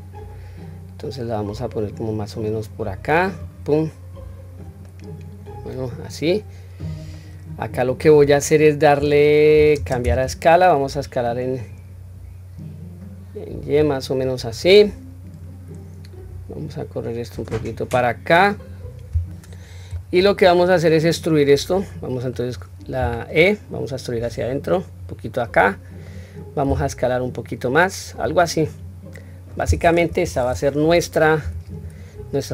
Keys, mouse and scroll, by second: 3.9-4.6 middle drag, 4.9-6.8 middle drag, 7.1 middle click, 9.8 shift+space, 11.0-13.8 drag, 14.1-14.6 middle drag, 16.3 click, 16.6-18.6 drag, 19.7-21.2 middle drag, 21.6 middle click, 22.7 e, 25.1-25.8 middle drag, 26.4 s, 28.1-29.2 middle drag, 29.8 KP_3, 30.2 scroll up 1, 31.1 scroll up 1, 31.1 q, 31.6-32.5 scroll down 1.